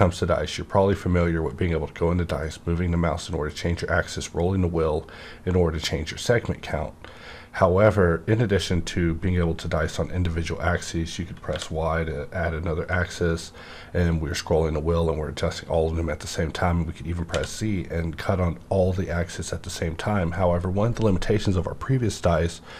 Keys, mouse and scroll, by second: 3.5 scroll down 1, 4.0 scroll up 1, 4.9 scroll down 1, 10.2 scroll down 1, 10.7 scroll down 2, 11.5 y, 13.0 scroll down 1, 13.3-13.6 scroll up 1, 13.8 scroll down 1, 13.9 scroll up 1, 14.5 scroll up 1, 14.8 scroll down 1, 15.0 scroll up 1, 15.3 scroll down 1, 15.7 scroll up 1, 15.9-17.3 scroll down 1, 17.5 scroll down 1, 17.5 z, 17.8 scroll up 1, 18.1 scroll down 1, 18.4-18.7 scroll up 1, 18.8-19.2 scroll down 1, 19.2-21.2 scroll up 1, 21.2 scroll up 1.